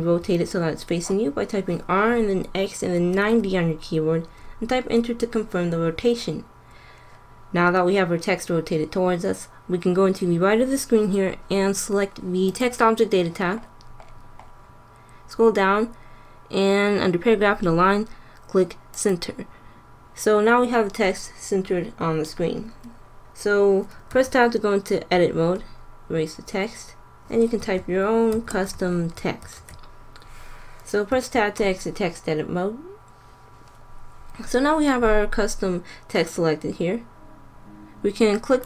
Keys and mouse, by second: 12.4-14.2 drag, 14.2-18.9 middle drag, 18.9-20.7 drag, 24.0 Tab, 25.4-26.2 BackSpace, 27.5-29.5 typing, 31.0 Tab, 38.5 click.